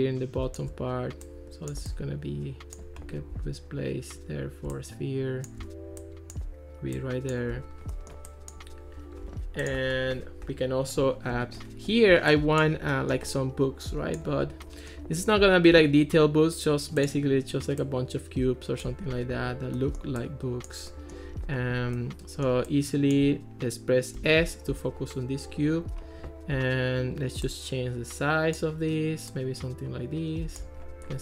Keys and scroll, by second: 24.2 s.